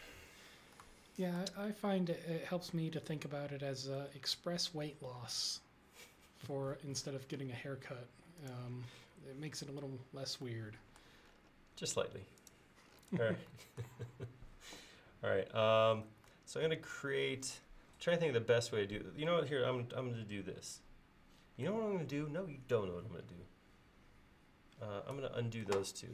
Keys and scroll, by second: 6.4 l.